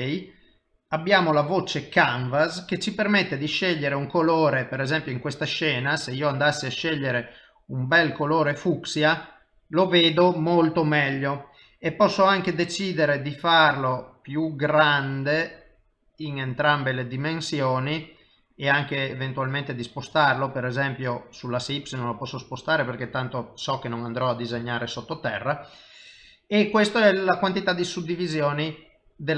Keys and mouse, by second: 1.3 click, 1.8 middle click, 3.5 click, 9.2 middle click, 13.3 click, 15.5 click, 20.8 click, 23.2 middle click, 24.6 shift+middle click, 25.0 middle click, 28.0 click.